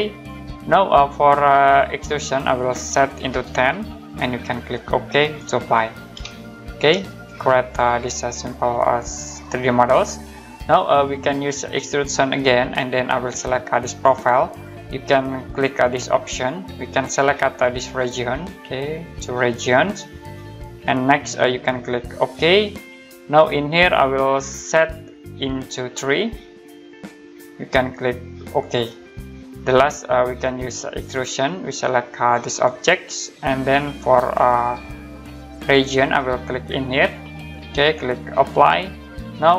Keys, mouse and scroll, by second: 0.1 click, 2.2 click, 3.1-4.2 typing, 5.2 click, 6.3 middle click, 7.1 middle click, 7.7 right click, 10.3 middle click, 11.8 click, 13.8 click, 16.2 click, 17.8 click, 19.5 click, 22.1 click, 24.4 click, 26.1 3, 26.8 click, 28.4 click, 30.9 click, 34.5 click, 36.9 click, 38.5 click.